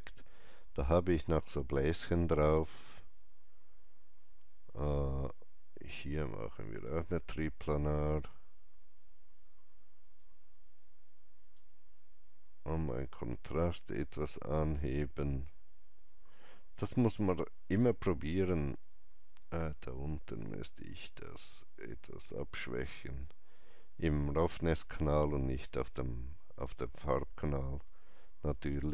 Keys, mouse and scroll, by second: 5.0 click, 5.0-5.8 scroll up 1, 5.8 click, 6.6 click, 8.6 scroll down 1, 10.1-17.7 drag, 16.8 scroll down 1, 17.7-20.5 scroll down 1, 20.6-25.8 drag.